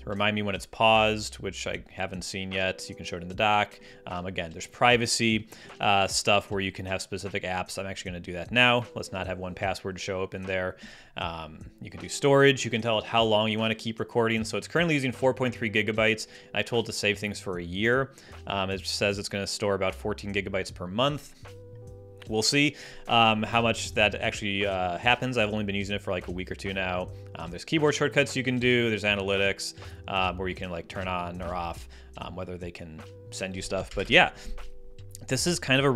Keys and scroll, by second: 33.9 ctrl+alt+super+space.